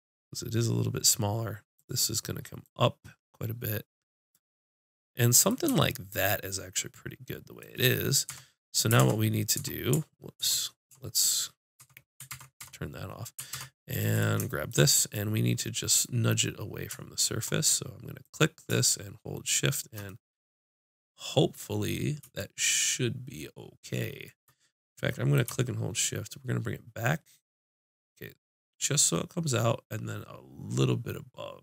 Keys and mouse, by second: 0.9-4.3 drag, 0.9 right click, 8.3 Tab, 9.0 ctrl+Tab, 9.6 Tab, 10.4 ctrl+Tab, 11.8 Tab, 12.6 Tab, 13.5 ctrl+Tab, 14.1 click, 14.6 middle click, 15.3 click, 19.7 click, 20.1 middle click, 25.3 click.